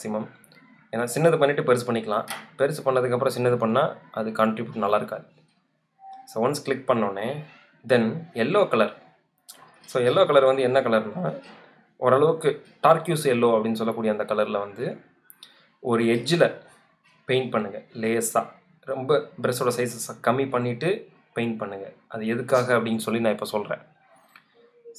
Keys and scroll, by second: 17.0 ctrl+alt+super+z, 17.5 alt+super+z.